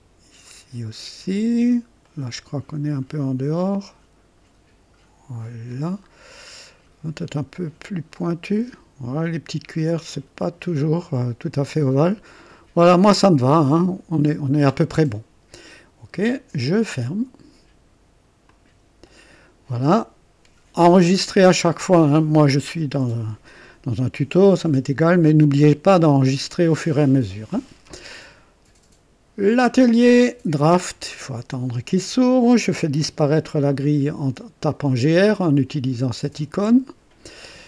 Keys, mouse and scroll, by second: 2.1 right click, 3.6-5.9 drag, 6.1 scroll down 1, 6.5 right click, 8.1-11.3 drag, 18.4 click, 30.8 click, 36.1-37.0 typing.